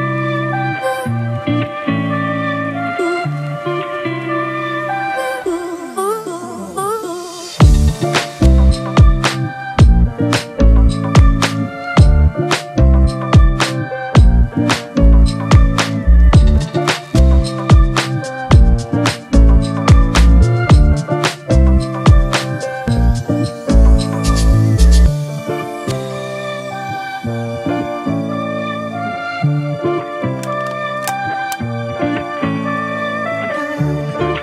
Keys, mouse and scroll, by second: 8.6 right click, 11.8 double click.